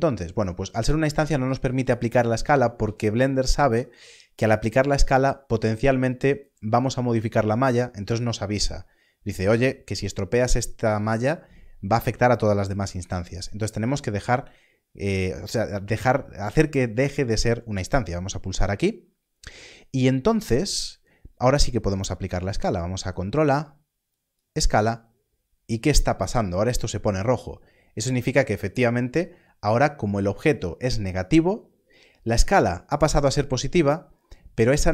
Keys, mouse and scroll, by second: 18.2 click, 22.2 ctrl+a, 24.1 click.